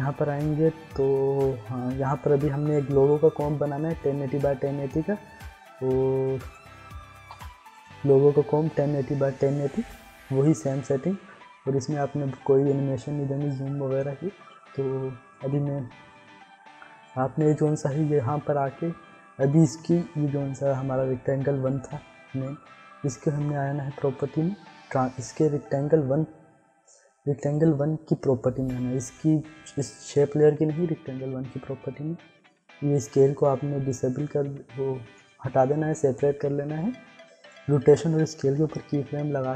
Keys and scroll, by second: 7.3 ctrl+k, 38.5 u.